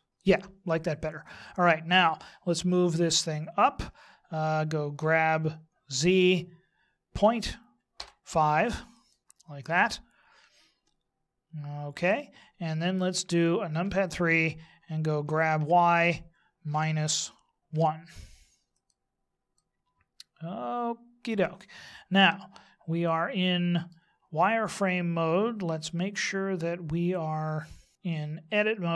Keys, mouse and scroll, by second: 5.0 g, 13.9 KP_3, 15.2 g, 19.5 middle click, 23.0 middle click.